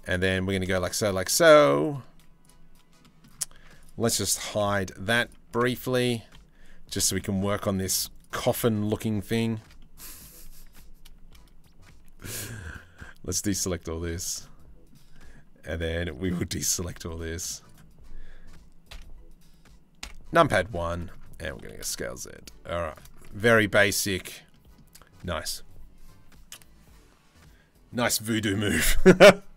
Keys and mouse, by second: 0.4 click, 0.9 middle click, 1.8 z, 2.6 click, 3.3 Tab, 4.2 h, 5.5 Tab, 6.6 click, 9.4 click, 10.2 1, 11.5 c, 14.0 middle click, 14.7 middle click, 15.6 middle click, 16.3 c, 18.5 KP_3, 19.6 KP_1, 20.3 shift+middle click, 21.0 s, 23.0 Tab, 23.1 click, 23.3-23.8 middle drag, 24.1 middle click.